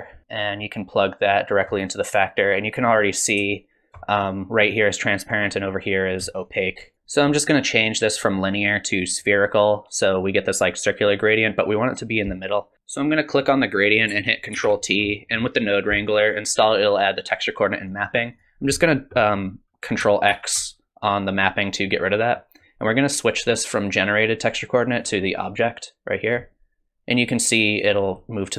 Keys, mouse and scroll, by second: 0.8 click, 6.5 ctrl+shift+click, 8.3 click, 12.7 ctrl+shift+t, 14.6 ctrl+t, 15.1 middle click, 18.3 click, 20.3 ctrl+x, 22.3 click, 25.0 click.